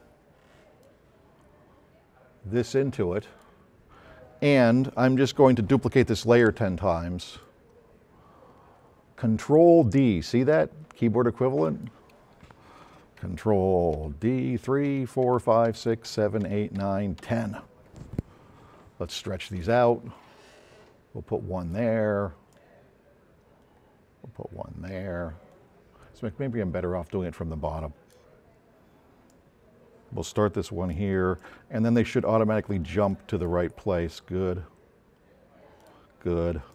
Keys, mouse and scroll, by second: 0.8-3.3 drag, 4.4 middle click, 7.4 click, 11.7 click, 14.0 d, 14.9 d, 19.6-21.7 drag, 22.6 drag, 31.1 click, 33.5-34.2 drag, 36.0-36.7 drag.